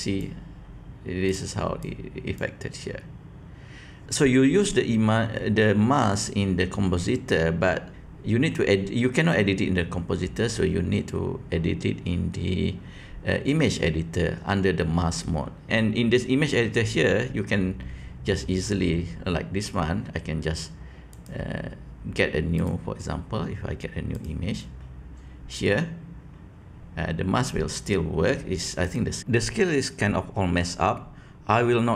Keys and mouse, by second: 28.8 click.